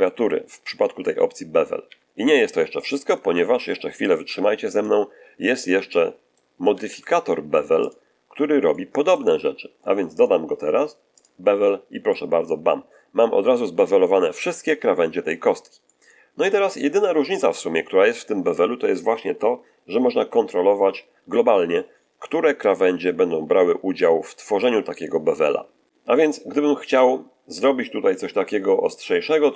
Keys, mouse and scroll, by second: 1.8 a, 3.1 Tab, 4.2 x, 4.6 click, 5.8-6.4 shift+middle drag, 6.6 shift+a, 7.8 click, 8.6-9.2 shift+middle drag, 10.1 click, 11.1 click, 12.0-13.9 middle drag, 15.8-16.9 shift+middle drag, 24.5-25.8 middle drag, 28.8-29.5 drag.